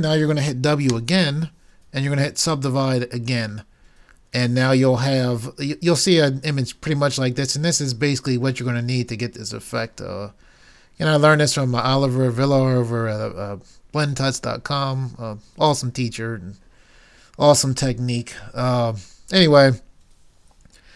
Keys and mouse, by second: 1.0 w.